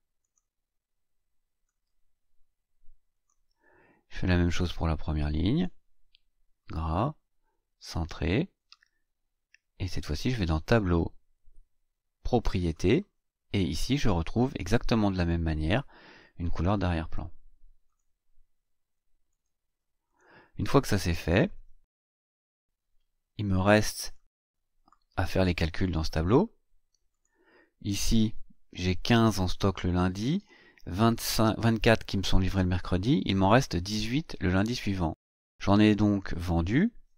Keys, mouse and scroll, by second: 0.2 click, 1.9-3.1 scroll up 4, 3.1 click, 4.5-5.8 drag, 6.5 click, 7.7 click, 9.8 click, 12.7 click, 14.6 click, 17.8 click, 19.2 click, 20.0 click, 22.1-24.3 drag, 25.8 click, 27.1 click.